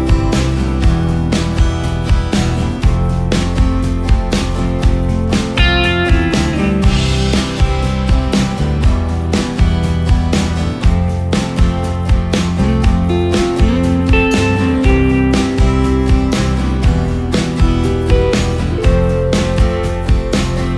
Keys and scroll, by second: 5.0 ctrl+space, 8.1 ctrl+space, 8.7 ctrl+space, 9.9 Delete, 11.8 ctrl+space, 14.1 ctrl+g, 14.4 ctrl+space, 19.0 ctrl+space, 19.6 ctrl+space.